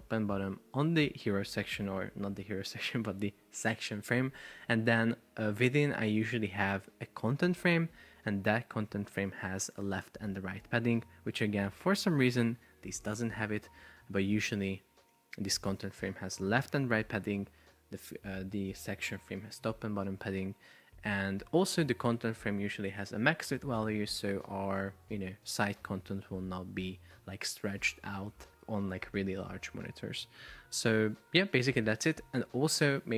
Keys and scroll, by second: 13.2 Return, 25.1 super+p, 30.3 Escape.